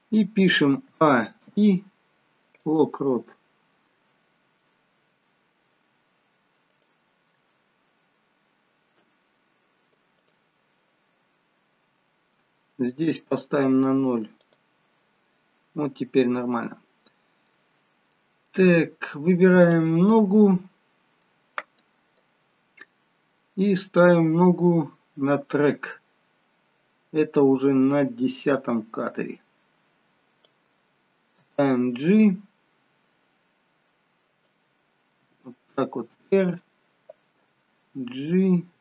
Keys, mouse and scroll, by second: 0.9 a, 1.5 i, 4.1-4.7 scroll up 4, 4.7 middle click, 6.8 click, 9.1 Delete, 14.5 click, 16.3 scroll up 2, 16.6 middle click, 17.8-18.2 scroll down 2, 18.2 middle click, 19.7 click, 21.3 middle click, 22.7 middle click, 28.2 click, 31.5 g, 35.4 r, 37.5 g.